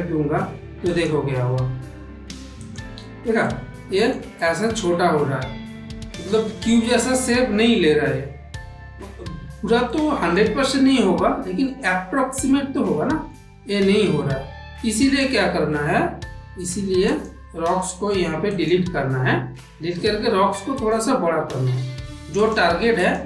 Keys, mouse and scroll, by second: 0.8 click, 2.5 click, 3.4 middle click, 4.3-9.5 middle drag, 9.8 shift+middle click, 10.5-13.2 middle drag, 14.9 click, 18.5 click, 20.6 click, 21.2 s, 22.9 click.